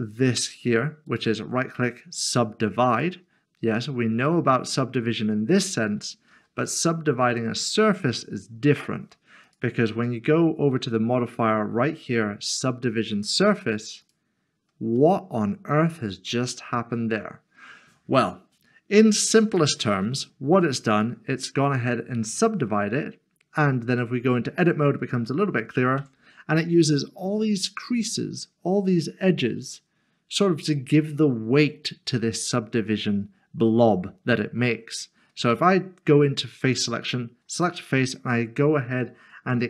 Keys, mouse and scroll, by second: 0.4 scroll down 1, 1.1 right click, 2.9 click, 6.3 ctrl+z, 7.3 Tab, 9.5 click, 14.0 click, 15.0 middle click, 19.6 click, 26.0 click, 29.6 click, 35.5 3, 36.6 3, 37.6 middle click, 38.1 scroll down 1.